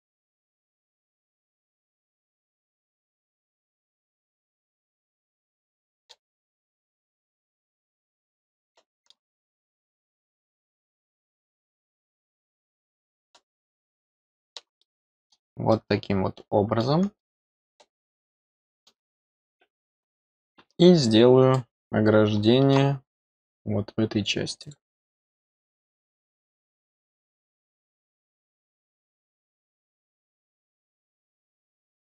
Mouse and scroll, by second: 0.8-4.1 scroll up 1, 4.1 click, 5.1 scroll down 1, 5.5 middle click, 7.7 click, 8.4 middle click, 10.8 click, 11.0 click, 12.2-12.9 scroll down 4, 13.2-14.5 middle drag, 14.8 middle click, 15.7-16.8 middle drag, 17.1-18.8 middle drag, 21.5-22.7 middle drag, 24.5 click, 27.1 click, 28.9 middle click, 30.9 click.